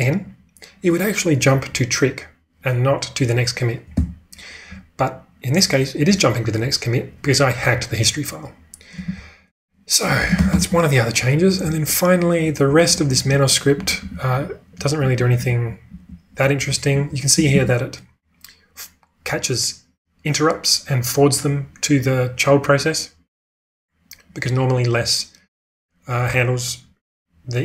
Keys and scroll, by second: 3.9 n, 9.0 q, 10.4 ctrl+space, 11.6-12.6 typing, 13.7-17.5 typing.